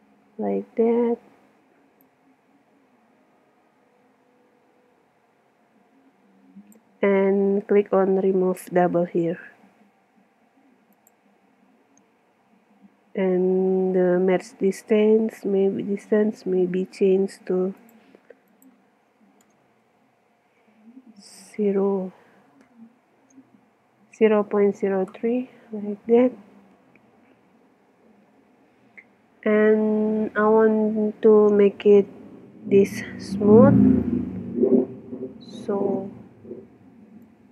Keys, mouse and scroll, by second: 2.0-4.0 drag, 10.9-12.8 drag, 17.8-19.7 drag, 19.7 BackSpace, 28.5 Tab, 29.3 middle click, 29.7 click, 30.6-31.6 middle drag, 31.6 click, 37.2-37.5 drag.